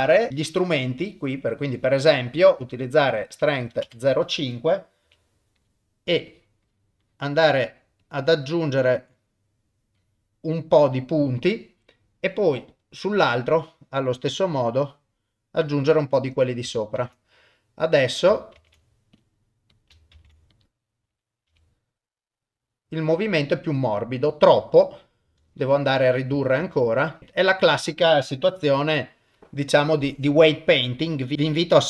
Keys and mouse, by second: 2.8-3.9 drag, 5.0 f, 6.3 click, 6.7 click, 7.1 click, 8.0 click, 8.5 click, 9.2 click, 10.0 click, 12.7 click, 13.7 click, 14.8 click, 17.0 ctrl+Tab, 18.5 ctrl+Tab, 19.7 click, 20.1 ctrl+Tab, 20.5 click, 21.5 r, 26.6 ctrl+Tab, 27.0 click, 28.7 f, 29.9 click, 31.0 click.